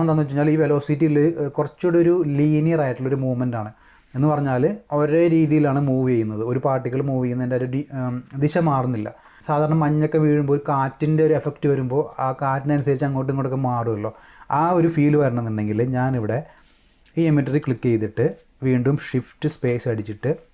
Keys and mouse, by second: 16.0 click, 16.6 click, 17.7 click, 19.5 shift+space.